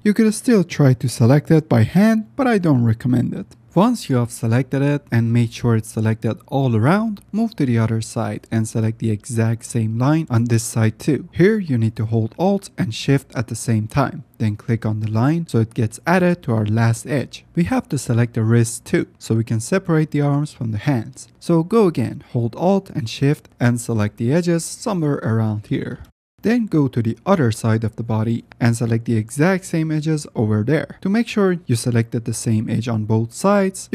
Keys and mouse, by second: 7.2 shift+click, 7.3 shift+middle click, 7.4 shift+click, 7.5 shift+middle click, 8.9 ctrl+alt+shift+z, 15.2 alt+shift+click, 16.0 shift+click, 16.8 shift+click, 18.0 shift+middle click, 18.6 shift+click, 18.7 shift+middle click, 18.8 shift+click, 19.5 shift+middle click, 24.7 ctrl+z, 25.4 alt+shift+click, 26.1 middle click, 27.5-28.9 shift+middle drag, 30.2 alt+middle click, 30.7 alt+shift+click, 31.6 middle click, 32.5 middle click, 32.7 click, 33.2 middle click, 33.8 middle click.